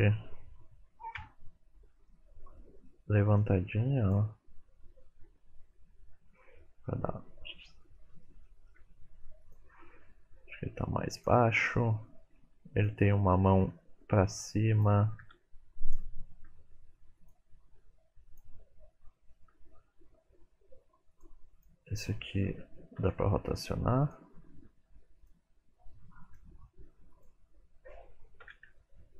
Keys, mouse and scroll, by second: 0.3 scroll up 1, 1.1 scroll up 3, 1.1 KP_Decimal, 1.7-2.1 scroll down 3, 2.0 middle click, 2.5 middle click, 3.2 r, 4.3-5.6 scroll down 4, 5.7 scroll down 2, 6.3 shift+middle click, 6.8 scroll down 1, 7.9 middle click, 8.4 shift+middle click, 9.4 click, 10.6 g, 11.6 shift+middle click, 12.7 click, 13.7 g, 15.2 r, 17.8 g, 22.9 r, 24.6 r, 26.2 click, 28.4 KP_1, 28.8 KP_Decimal.